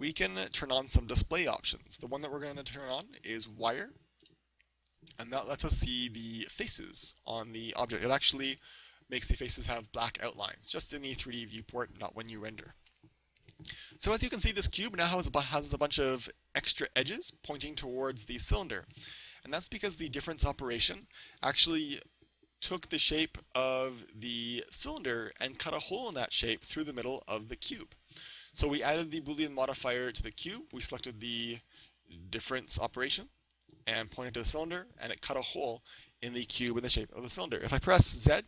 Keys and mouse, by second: 4.3-6.1 drag, 8.5 a, 13.0-14.7 middle drag, 16.0-18.0 middle drag, 23.1-24.8 middle drag, 30.0 right click, 31.9-33.7 drag, 38.3 z.